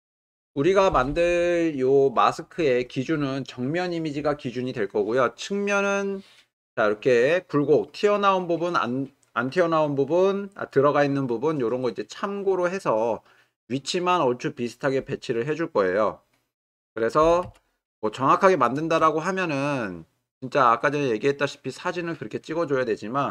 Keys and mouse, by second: 17.2 g, 17.4 y.